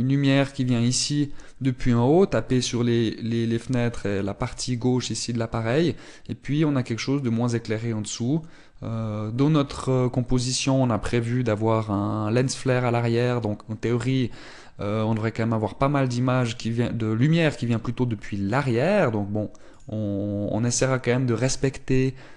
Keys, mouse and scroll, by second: 21.5 middle click.